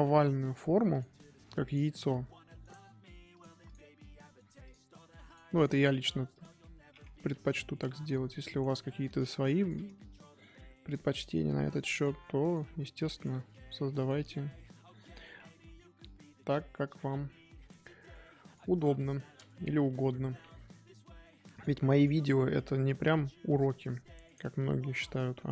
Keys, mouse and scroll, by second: 1.6 click, 2.9 g, 3.6 click, 4.6 click, 5.5 click, 6.6 middle click, 7.2 KP_3, 8.4 shift+middle click, 9.1 click, 9.6 click, 11.1 click, 12.4 click, 13.0 click, 14.2 click, 14.8-18.4 middle drag, 18.4 click, 18.7 KP_3, 20.2 g, 21.9 click, 22.8 click, 24.5-25.5 middle drag.